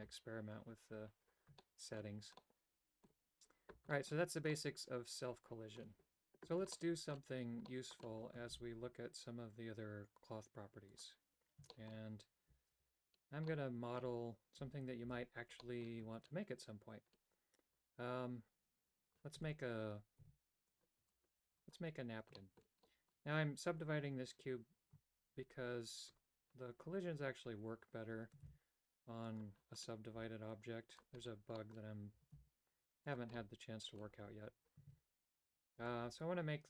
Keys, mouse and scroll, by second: 1.6 shift+middle click, 2.4 middle click, 3.9 shift+middle click, 4.5-5.8 middle drag, 9.7 shift+a, 11.7 shift+middle click, 12.6 alt+f, 13.4 middle click, 15.0 alt+g, 15.7 middle click, 19.3 Tab, 20.1 w, 21.0 w, 21.4 w, 22.4 shift+middle click, 22.8 middle click, 24.9 Tab, 26.0 Tab, 28.4 shift+s, 30.1 s, 31.5 middle click, 32.1 s, 33.3 middle click, 34.1 Tab, 34.8 shift+a, 35.7-36.6 right drag.